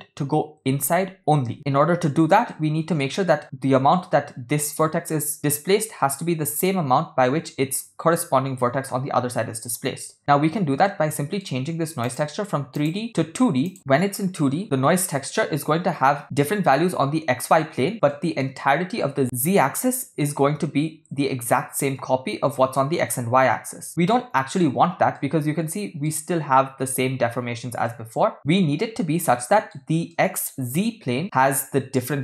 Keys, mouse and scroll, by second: 2.5-3.0 middle drag, 6.2-6.7 shift+middle drag, 10.8 shift+middle click, 12.1 click, 12.8-13.7 drag, 18.1 shift+middle drag, 24.1-24.6 shift+middle drag, 25.2-26.0 middle drag, 27.9-28.4 middle drag, 28.8-29.8 middle drag, 30.1-30.5 middle drag.